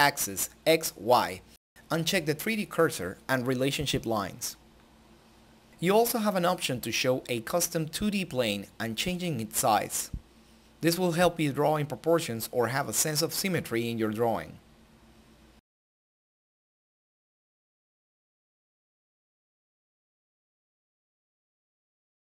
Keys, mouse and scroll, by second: 6.3 click, 9.1 click, 11.8 click, 14.3-22.3 drag.